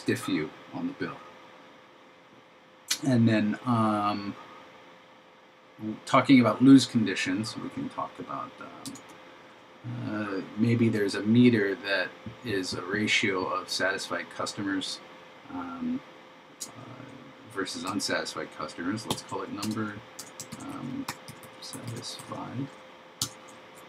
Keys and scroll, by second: 19.2 shift+3, 20.6 shift+s, 23.7 super+Left.